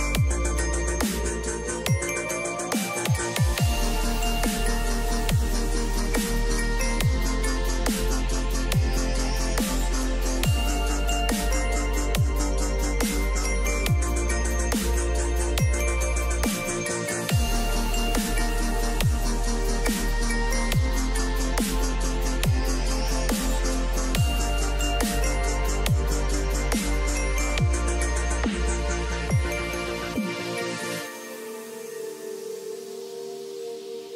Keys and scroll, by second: 25.5 ctrl+shift+].